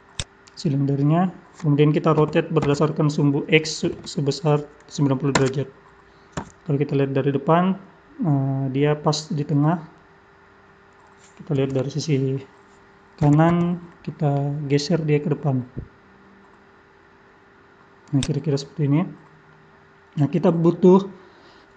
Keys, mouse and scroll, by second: 0.5-1.1 scroll up 11, 2.2-3.5 scroll up 4, 2.2 r, 6.3 KP_1, 7.1-7.4 scroll up 5, 9.4-10.4 scroll up 1, 11.6 KP_3, 13.2 g, 18.9-19.5 scroll down 2, 19.5 middle click.